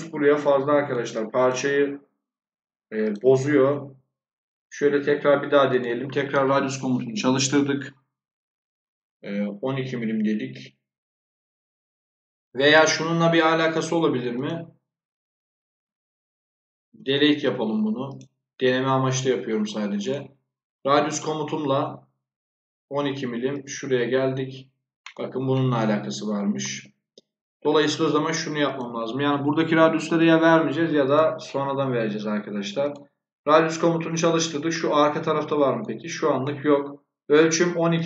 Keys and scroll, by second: 13.4 Escape, 16.8 Delete, 27.8 Escape, 29.7-30.5 typing.